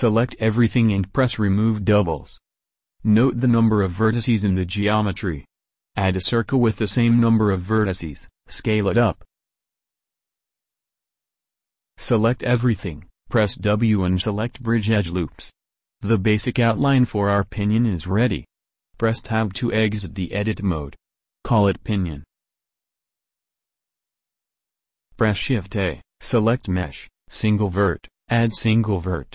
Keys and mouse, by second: 0.2 a, 5.3 shift+a, 8.1 4, 8.2 4, 9.3 s, 12.0 a, 12.2 a, 12.5 w, 18.7 Tab, 20.4-22.0 drag, 24.9 shift+a, 28.8 alt+Tab.